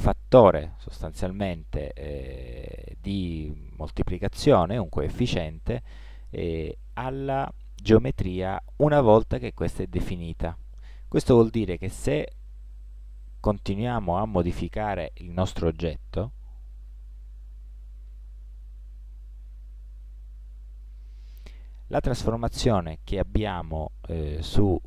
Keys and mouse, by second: 6.1-8.0 middle drag, 9.9-12.0 middle drag, 12.0-13.7 drag, 12.4 Tab, 16.2 middle click, 16.9 r, 22.2-24.5 middle drag, 24.6-24.8 middle drag.